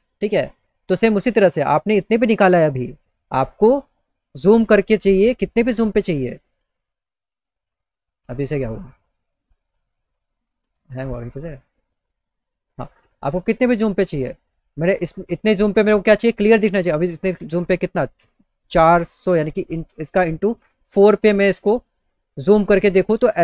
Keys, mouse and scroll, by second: 6.1 click, 8.6 click, 10.9 click.